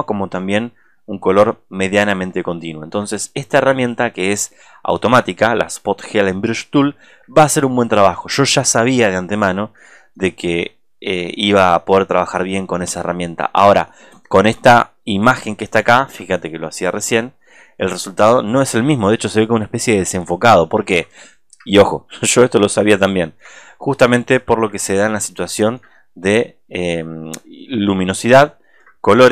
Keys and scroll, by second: 19.0 ctrl+space, 20.3 ctrl+space, 24.5 ctrl+z, 25.0 space.